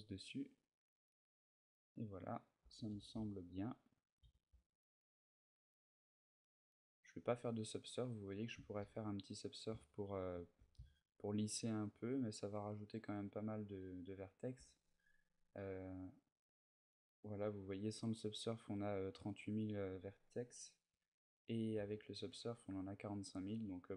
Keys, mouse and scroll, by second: 0.4 middle click, 3.8 shift+click, 3.8 g, 4.0 a, 4.2 middle click, 7.1 right click, 8.6 ctrl+2, 9.7 ctrl+middle click, 10.7 shift+middle click, 11.4 shift+middle click, 16.0 click, 21.5 ctrl+2, 23.5 click.